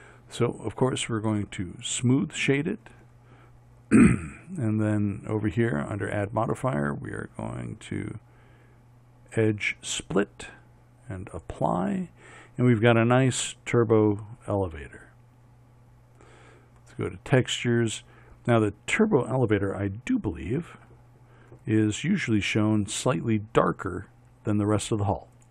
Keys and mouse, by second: 1.9-9.5 drag, 11.5-25.5 drag.